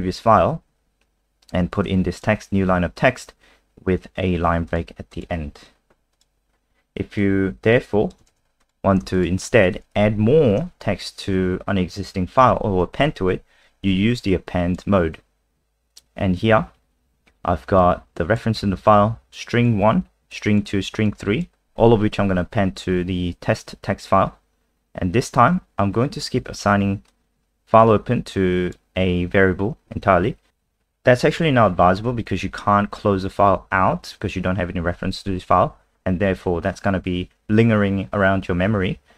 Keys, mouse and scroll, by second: 5.5 alt+F4, 6.2 click, 6.5-7.2 scroll down 2, 7.2 click, 8.3 ctrl+c, 8.6 click, 9.1 shift+click, 10.0 shift+Up, 10.7 BackSpace, 12.4 ctrl+v, 12.9 ctrl+s, 14.3 click, 23.2-25.8 scroll down 1, 27.1 click.